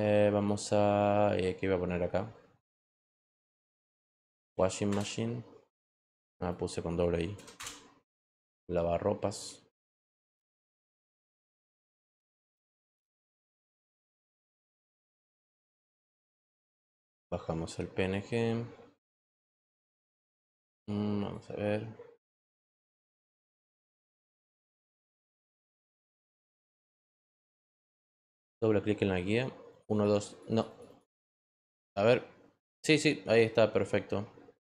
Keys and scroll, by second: 2.4-4.1 typing, 4.8 Return, 7.3 BackSpace, 7.5 Return.